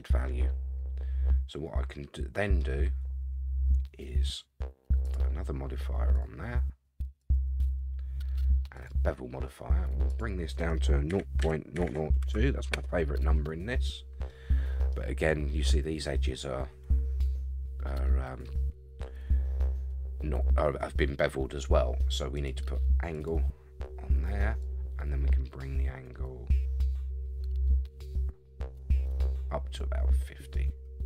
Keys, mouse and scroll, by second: 5.0-5.4 drag, 6.1-6.4 drag, 7.2-8.8 drag, 10.1-13.2 drag, 11.8 0, 14.3-14.9 middle drag, 14.3 scroll down 1, 14.9-15.5 scroll up 4, 22.3-23.3 drag, 24.6-31.0 drag.